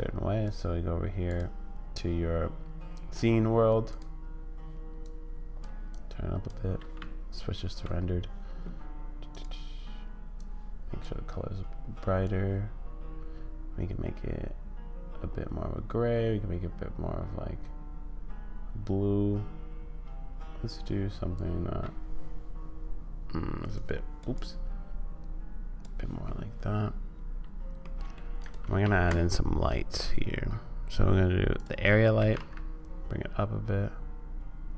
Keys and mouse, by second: 0.5 click, 3.8 click, 7.0 z, 9.3 click, 27.8 middle click, 28.5 click, 28.8 shift+a, 32.2 g.